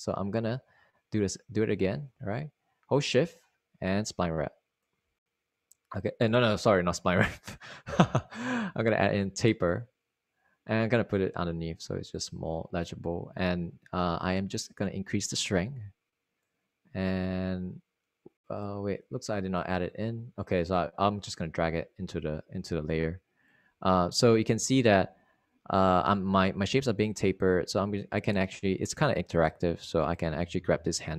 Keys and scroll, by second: 0.9 super+z, 7.8 super+z.